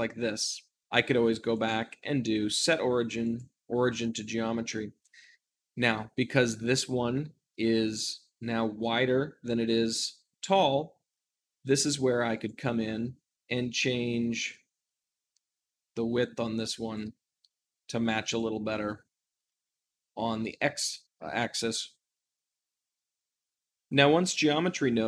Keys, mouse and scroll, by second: 0.0 middle click, 0.8 Tab, 1.4-23.6 drag, 23.6-25.0 shift+middle drag.